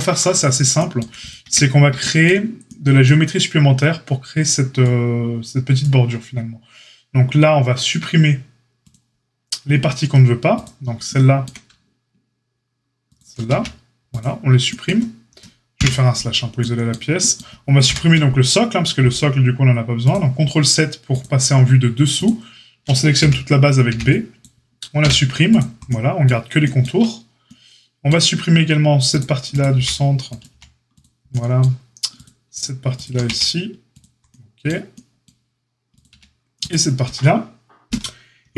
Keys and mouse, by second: 1.4 Tab, 8.8-10.6 drag, 10.6-13.0 middle drag, 13.0 ctrl+click, 13.1-29.0 ctrl+middle drag, 13.4 x, 15.7 KP_Divide, 17.8 ctrl+KP_7, 23.1 b, 23.8 b, 24.9 x, 29.0 click, 29.1 middle click, 29.4 click, 29.5-38.5 middle drag, 29.7 c, 30.4 x, 33.2 x, 36.0 x.